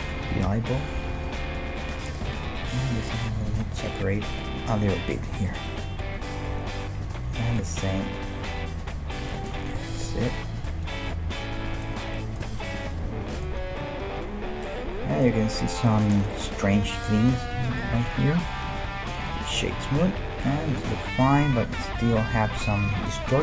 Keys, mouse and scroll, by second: 0.2 g, 2.1-4.2 right drag, 2.9 s, 7.6-11.3 right drag, 8.4 s, 9.8-12.6 middle drag, 10.1 g, 13.7 a, 13.8 a, 14.1 w, 14.7-15.1 scroll up 1, 18.7 w, 21.3-21.7 scroll down 1, 21.7-22.0 scroll up 1.